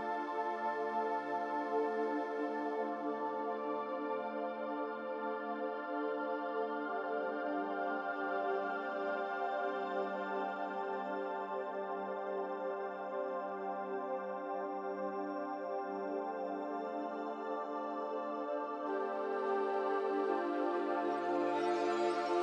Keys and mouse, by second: 0.5 s, 3.4 g, 5.7 s, 12.0-12.5 drag, 13.2 g, 14.4 g, 18.8 shift+click, 20.0 ctrl+shift+KP_Subtract.